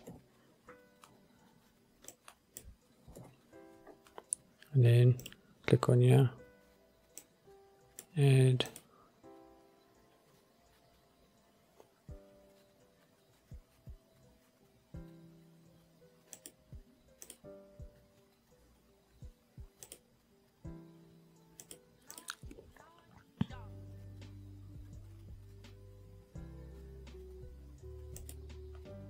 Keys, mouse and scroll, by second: 0.2 Delete, 1.2-1.5 scroll down 2, 2.2-2.7 drag, 3.3 Delete, 4.0-4.3 scroll up 2, 4.3-5.2 scroll down 1, 5.2 scroll up 1, 5.3 click, 7.3 click, 8.8-16.6 drag, 17.4-19.7 drag, 20.0-21.9 drag, 22.3-28.5 drag.